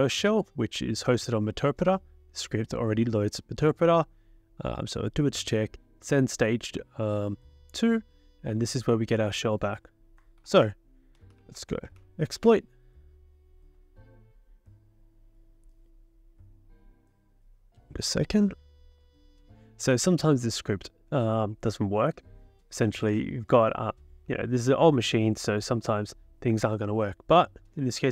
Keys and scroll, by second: 10.4 ctrl+l, 10.9-12.5 typing, 18.9 Return.